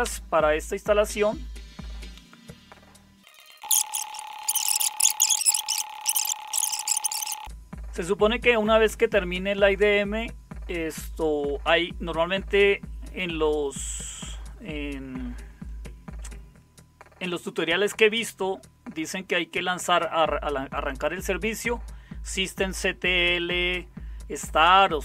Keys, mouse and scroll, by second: 0.0 Return.